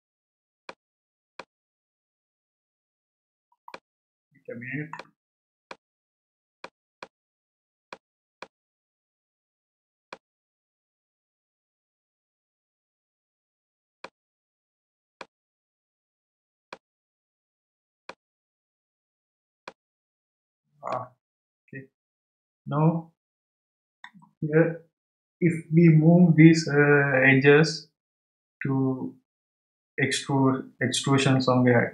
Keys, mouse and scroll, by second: 0.6-1.6 shift+middle drag, 1.6 scroll up 1, 2.4 scroll up 3, 2.9-3.3 scroll down 1, 3.7-11.4 shift+middle drag, 12.6-13.2 scroll up 1, 13.2-14.2 scroll down 1, 14.2-15.9 shift+middle drag, 15.9-16.7 scroll up 2, 16.7 shift+middle click, 18.4-19.0 scroll down 1, 19.0 scroll down 1, 19.6-22.6 shift+middle drag.